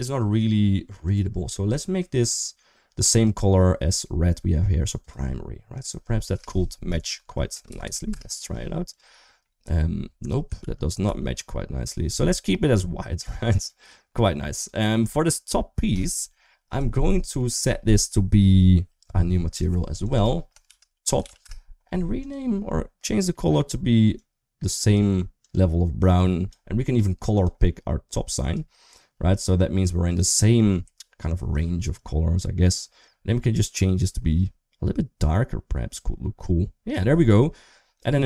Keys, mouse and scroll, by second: 0.9 click, 4.7 click, 5.6-7.9 drag, 8.7 click, 9.2 middle click, 10.4 ctrl+z, 10.8 ctrl+z, 12.8 middle click, 13.3 click, 14.3 click, 16.9 middle click, 19.3 click, 19.8 click, 19.9-21.2 drag, 28.3 typing, 38.0 Tab.